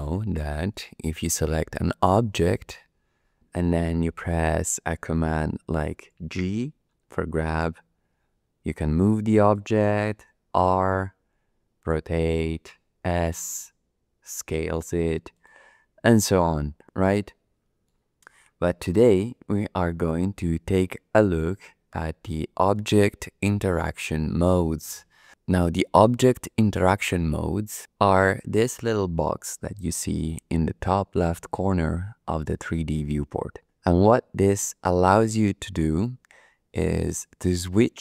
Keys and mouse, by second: 0.4 shift+click, 1.7 click, 7.1 g, 9.5 click, 10.2 r, 12.1 click, 12.9 s, 15.3-17.0 drag, 17.0 middle click, 21.9 middle click, 22.4 click, 22.6 middle click.